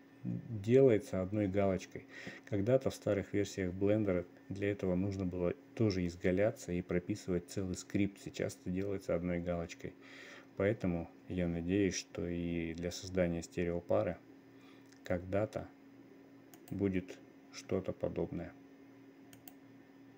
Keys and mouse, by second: 8.7-11.6 middle drag, 12.1 middle click, 13.5 click, 14.5 click, 17.0 click, 17.7 click, 18.3 click, 19.8 middle click.